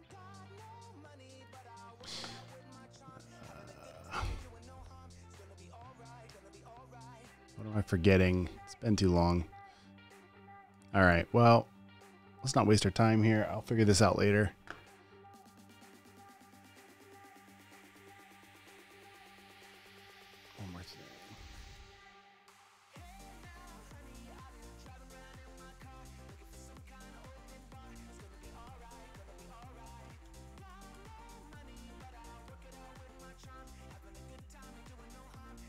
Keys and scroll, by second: 31.1-32.5 typing.